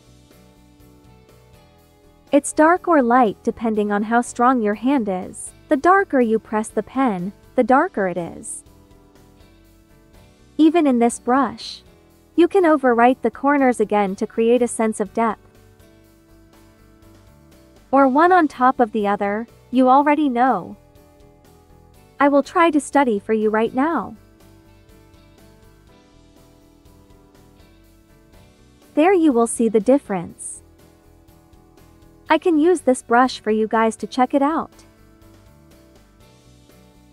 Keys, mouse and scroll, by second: 7.4-9.9 typing, 9.3 click, 12.1 typing, 12.2 click, 12.5 ctrl+z, 12.5 ctrl+click, 16.6 ctrl+z, 16.7 ctrl+click, 17.9 ctrl+z, 18.0 ctrl+click, 20.4 ctrl+z, 20.5 ctrl+click, 22.4 click, 22.6 ctrl+z, 22.8 ctrl+click, 23.0 ctrl+z, 23.1 ctrl+click, 24.2 click, 24.8 ctrl+click, 26.9-27.3 typing, 28.4 typing, 31.2-31.9 typing, 31.9 click, 33.5 click, 34.7 ctrl+z, 35.1 space, 35.2 click, 35.6 space, 36.6 click.